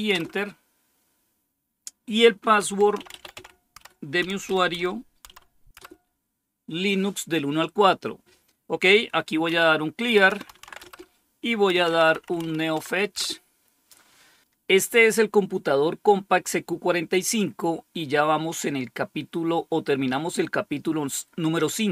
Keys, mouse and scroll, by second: 0.0 Return, 2.3-5.7 typing, 9.4-12.8 typing, 13.1 Return.